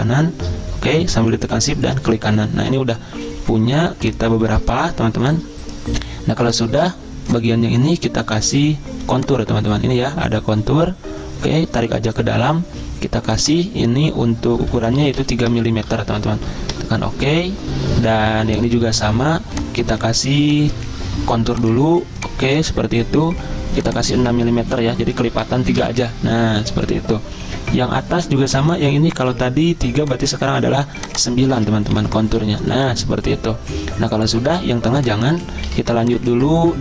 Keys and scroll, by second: 16.7 Return, 25.8 Return, 32.4 Return, 35.7 z.